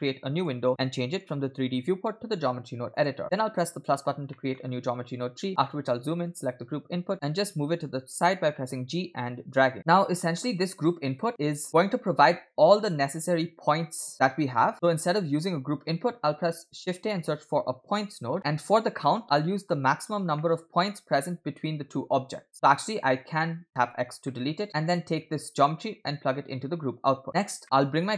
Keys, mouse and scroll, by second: 0.0 click, 1.2-3.1 drag, 3.8 click, 4.4 middle click, 4.7-5.6 scroll up 7, 5.6 middle click, 6.2 drag, 7.6 g, 9.8 click, 9.9 middle click, 10.7 click, 14.7 middle click, 14.7-15.0 scroll down 2, 16.1 shift+a, 18.4 middle click, 20.1 scroll down 2, 20.4 middle click, 22.5-23.7 drag, 24.0 x, 24.3 middle click, 24.7 click, 25.7-27.4 drag, 27.3 middle click.